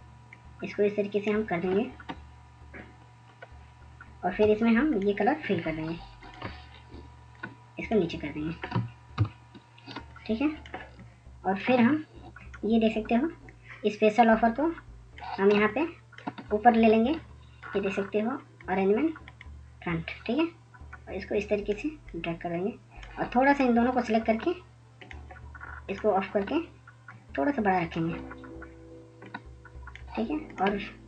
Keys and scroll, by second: 5.0-5.6 Down, 7.3 Down, 7.3 i, 12.2-14.5 ctrl+0.